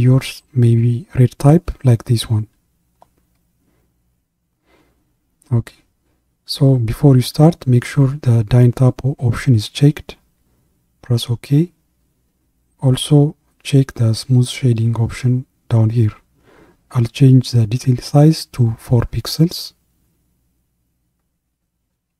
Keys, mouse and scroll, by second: 14.2 click.